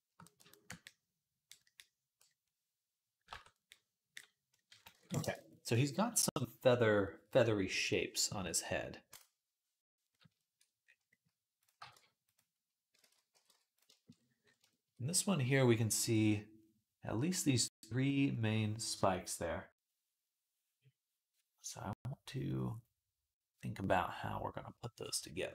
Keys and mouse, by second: 0.0-1.2 ctrl+drag, 3.2 ctrl+Tab, 4.4-5.7 ctrl+right drag, 4.8 ctrl+s, 5.7-9.9 drag, 7.6 right click, 9.9 right click, 10.7 click, 10.7-12.8 right drag, 11.4 click, 11.6 g, 12.8 ctrl+z, 12.8-14.0 ctrl+drag, 13.1 g, 14.0 click, 25.4-25.5 right drag.